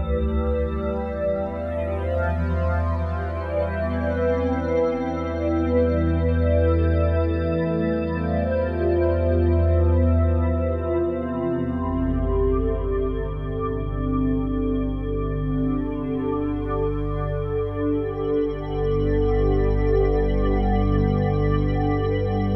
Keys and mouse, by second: 0.0-0.7 typing, 0.2 Return, 0.7 click, 1.2 click, 2.1 typing, 2.7 Return, 4.4 click, 4.9 click, 5.6 2, 6.0 0, 6.2 Return, 7.2 click, 7.6 space, 10.0 space, 11.2 click, 12.3-15.8 drag, 19.4 click, 21.2 click, 21.6 click, 22.2 click.